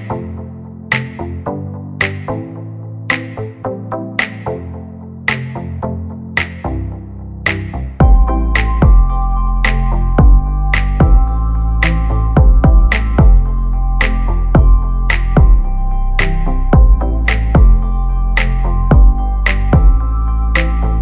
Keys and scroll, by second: 1.2-2.6 typing, 5.2 l, 20.0 space, 20.9 Delete.